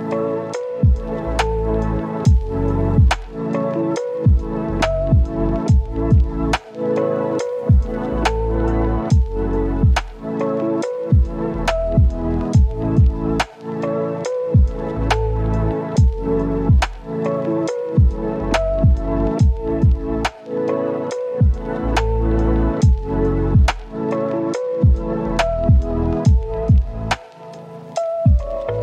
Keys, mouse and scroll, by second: 0.0 right click, 0.4-0.8 scroll up 1, 0.8 click, 1.8 right click, 2.1 scroll down 1, 2.2 scroll up 1, 2.3 right click, 2.3 Tab, 2.6 scroll down 1, 2.7 scroll up 1, 2.8 right click, 3.1 Tab, 4.1 scroll up 1, 4.5 ctrl+shift+click, 5.1 scroll down 1, 5.2 scroll up 1, 5.7 ctrl+shift+click, 6.4 right click, 6.7-7.3 scroll up 1, 7.3 click, 8.7 ctrl+shift+click, 10.7 right click, 11.0 scroll down 1, 11.2 scroll up 1, 11.3-13.2 right drag, 13.2 scroll down 1, 13.3 scroll up 1, 13.5 right click, 13.6 scroll down 1, 13.7 scroll up 1, 14.3 ctrl+shift+click, 15.0 scroll down 1, 15.2 scroll up 1, 15.5 right click, 16.2 ctrl+shift+click, 16.4 scroll up 1, 16.5 right click, 17.1 click, 18.2 ctrl+shift+click, 20.2 ctrl+shift+click, 21.5 right click, 21.7 scroll down 1, 21.8 scroll up 1, 21.9 right click, 23.4 scroll up 1, 24.4 click, 24.9 right click, 25.5 click, 26.4-28.8 right drag.